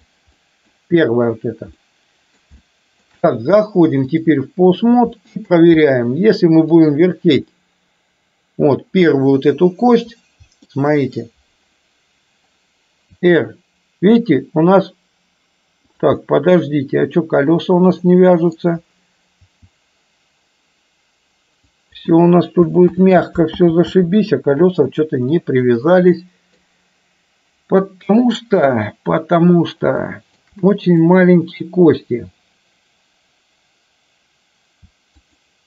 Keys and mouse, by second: 0.4 middle click, 1.9 middle click, 2.8 shift+middle click, 4.1-5.0 drag, 5.3 middle click, 6.0 middle click, 7.6-8.9 middle drag, 10.8-11.3 middle drag, 13.3 r, 16.1-18.6 middle drag, 19.5 r, 23.0 ctrl+z, 23.8 ctrl+z, 25.4-26.8 middle drag, 30.1 shift+middle drag, 31.1 click, 35.4 shift+click.